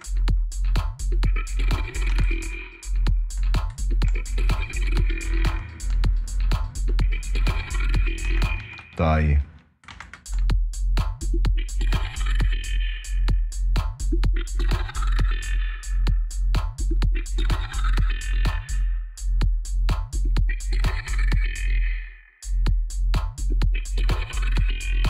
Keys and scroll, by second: 1.8 space, 5.0 space, 8.0 space, 9.6 space, 12.1 space, 14.9 space, 18.2 space, 21.1 space, 24.8 space.